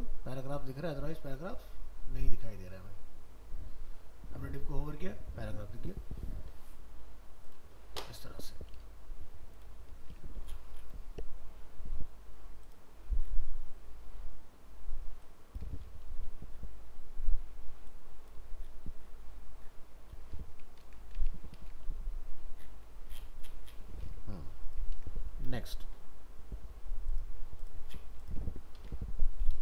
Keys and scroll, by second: 20.8 ctrl+s, 21.2 alt+Tab, 25.0 ctrl+w, 28.8 ctrl+End.